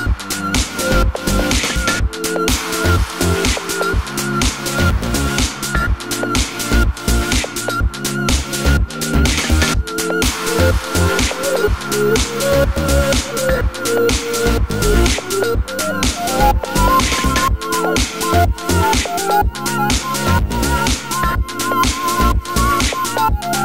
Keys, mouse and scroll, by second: 0.5 click, 1.1 click, 1.4 middle click, 2.1 scroll up 2, 2.4 shift+middle click, 2.7 Tab, 3.8 ctrl+KP_Add, 6.9 middle click, 8.0 alt+click, 8.8 2, 9.1 alt+click, 9.6 1, 16.2 g, 17.6 middle click, 17.6 3, 17.8 click, 18.2 shift+click, 18.4 click, 18.5 click, 18.8-21.9 middle drag, 20.4 i, 21.9 e, 23.5 middle click.